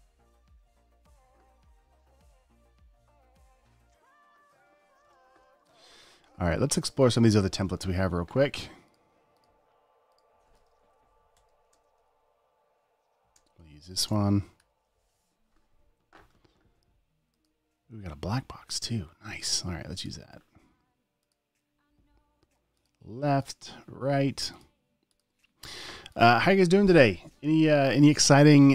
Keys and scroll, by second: 5.4 super+w, 11.4 Right, 11.7 Down, 12.1 space, 13.8 space, 15.1 super+o.